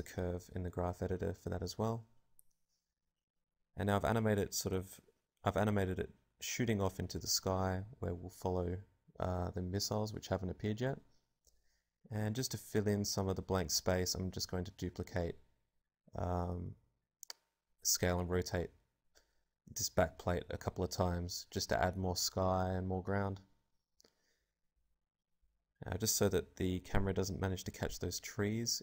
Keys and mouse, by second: 2.3-4.0 drag, 5.2 click, 5.4 alt+a, 9.1 alt+a, 9.1 click, 10.1 click, 10.7-16.7 typing, 11.7 click, 12.2 right click, 13.6 Tab, 15.4 click, 16.3 Tab, 17.9 KP_0, 19.4-20.6 typing, 21.1-23.4 drag, 23.4 click, 24.2 a, 24.8-26.6 drag.